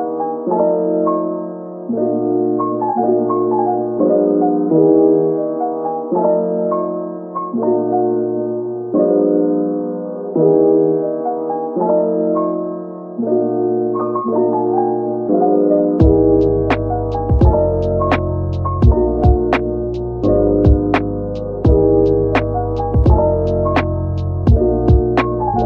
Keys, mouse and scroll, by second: 0.7-1.7 scroll down 1, 17.0 shift+click, 20.0 shift+click, 23.0 scroll up 1, 23.5 shift+click.